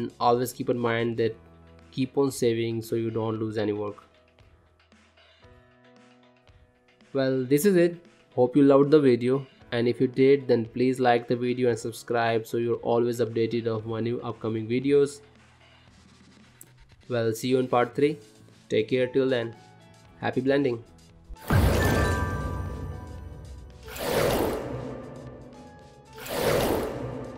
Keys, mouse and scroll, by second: 0.2 click, 0.6 click, 1.6 click, 2.0 click, 3.0 click, 3.2 middle click, 5.7 shift+middle click, 6.3 Tab, 6.6 middle click, 9.9 middle click, 10.9 click, 12.0 middle click.